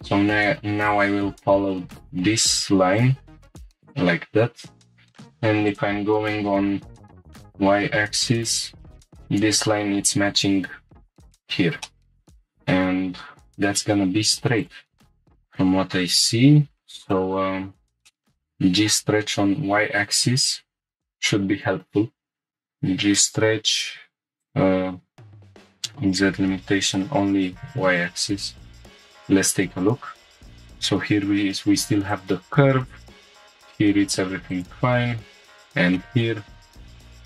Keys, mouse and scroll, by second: 0.9-1.8 drag, 1.8 g, 2.9 click, 3.7 scroll down 1, 4.9 click, 4.9 scroll up 1, 5.7 ctrl+click, 7.0 g, 7.3 y, 11.1 click, 11.2-11.8 scroll down 2, 11.8 middle click, 15.1 click, 15.1 scroll down 1, 17.1 middle click, 17.7 scroll down 2, 18.1 middle click, 20.5 scroll up 1, 20.8 right click, 20.8 2, 24.4-29.3 click, 30.0-30.6 scroll up 3, 30.4 shift+middle click, 32.2 click, 33.3 click, 35.4-35.8 scroll down 2, 35.9 shift+middle drag, 36.8-37.2 middle drag.